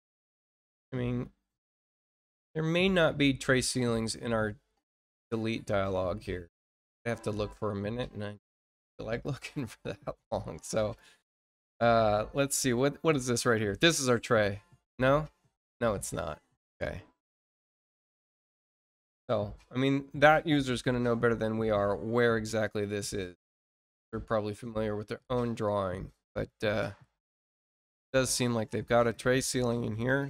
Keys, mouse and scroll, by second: 8.7 click, 10.7 click, 15.7 click, 17.4 click, 18.5 click, 22.5 click, 27.7 click, 28.9 click, 29.9 click.